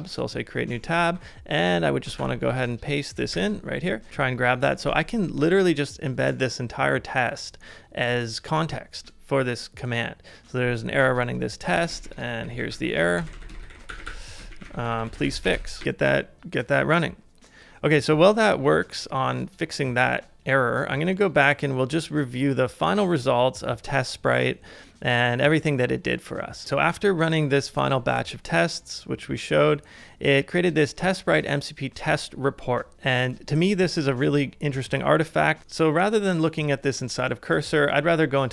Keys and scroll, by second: 1.0 super+b, 2.2 super+b, 3.3 super+v, 4.1 super+Tab, 4.1 typing, 11.9 shift+Return, 11.9-13.2 typing, 35.6 alt+super+b.